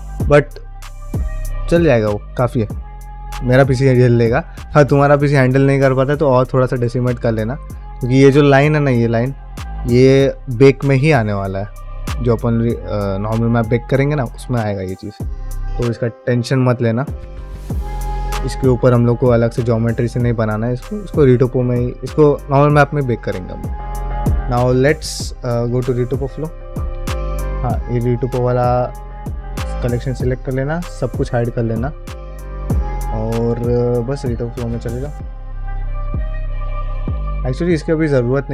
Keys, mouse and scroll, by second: 24.4-25.1 middle drag, 27.4 click, 32.5 click, 32.9 shift+middle click.